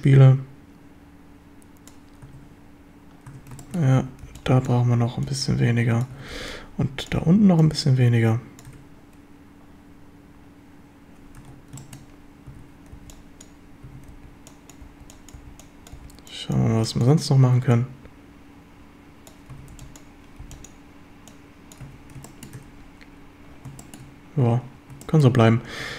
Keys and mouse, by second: 2.3 Tab, 3.3 Tab, 3.6 shift+drag, 4.0 a, 4.3 b, 5.3 click, 6.2 a, 6.3 b, 7.6 click, 8.7 Tab, 11.4 Tab, 11.8 shift+drag, 12.5-14.9 typing, 16.0 b, 16.7 b, 17.8-19.3 drag, 19.5 a, 20.4 b, 21.3 click, 21.8 a, 22.3 shift+drag, 22.6 Tab, 23.8 shift+drag, 25.1 shift+drag, 25.8 Tab.